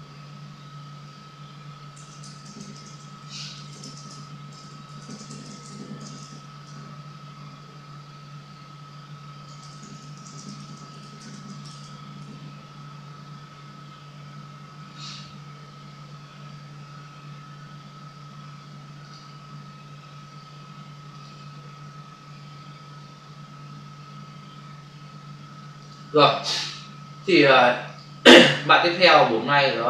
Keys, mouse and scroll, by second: 0.8-6.1 typing, 6.6 Return, 9.5-11.3 typing, 12.1 Return, 19.0 click, 21.1 click, 25.7 click, 27.7 click.